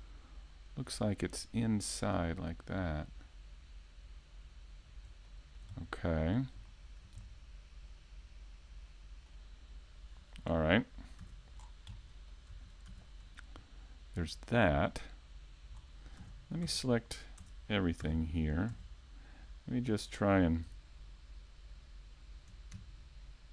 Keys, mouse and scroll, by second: 1.2 right click, 1.9 KP_3, 2.7 scroll up 2, 3.0 shift+middle click, 3.7 click, 6.1 scroll down 2, 6.1 a, 6.4 middle click, 7.7 KP_5, 8.0-8.5 scroll down 1, 8.5 shift+middle click, 8.9 scroll down 1, 9.2 shift+middle click, 9.6 middle click, 13.0 scroll down 2, 13.2 middle click, 13.6-14.4 scroll up 2, 14.0 shift+middle click.